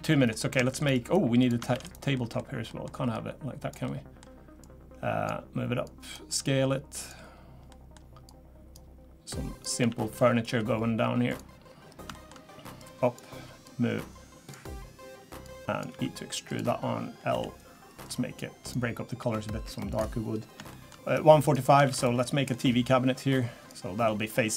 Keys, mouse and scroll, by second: 0.1 middle click, 0.6 shift+middle click, 1.4 click, 1.7 shift+d, 2.1 middle click, 2.7 middle click, 3.1 click, 3.8 middle click, 4.6 click, 5.8 click, 6.4 s, 7.7 middle click, 8.2 click, 9.3 click, 9.8 s, 11.8 scroll up 2, 12.1 shift+middle click, 12.8 click, 13.6 click, 15.4 click, 15.9 e, 17.3 l, 18.0 click, 19.2 g, 20.2 scroll down 1, 20.7 shift+middle click, 21.0-21.4 scroll down 1, 21.4 click, 21.8 shift+d, 22.2 middle click, 22.5 scroll up 2, 23.2 click, 24.0 middle click.